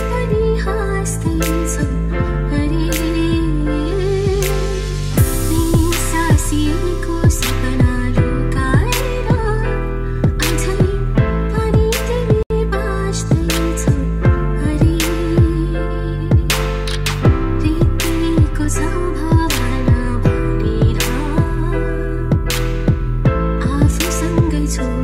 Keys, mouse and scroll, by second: 14.0-14.5 scroll down 2, 15.1-15.5 ctrl+scroll down 2.